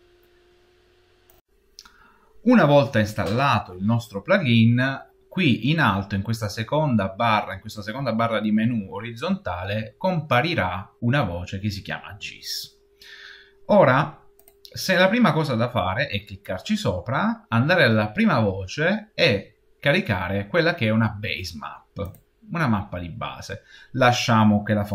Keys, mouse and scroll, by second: 14.3 click.